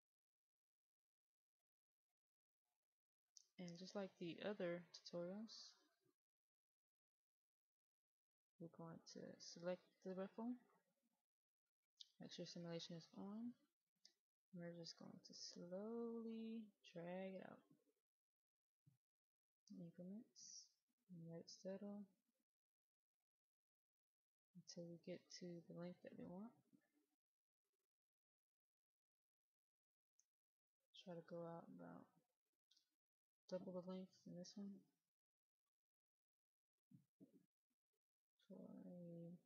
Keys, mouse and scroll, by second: 2.9-3.8 scroll up 1, 3.8 middle click, 5.2-10.4 drag, 10.7 middle click, 12.2-39.4 drag.